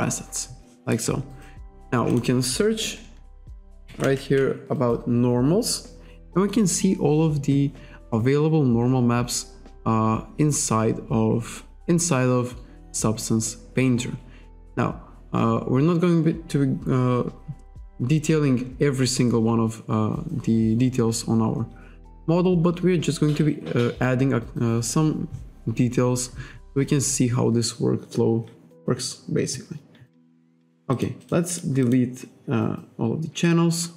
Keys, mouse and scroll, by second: 2.2 click, 3.2-5.0 typing, 8.3-8.7 scroll down 1, 8.9-9.3 scroll down 1, 11.4-11.8 scroll up 1, 12.6-13.0 scroll up 1, 13.7-14.1 scroll down 1, 15.1-15.6 scroll up 1, 26.7-27.5 scroll down 1, 31.0 click, 31.3 click, 31.6 click, 31.9 click.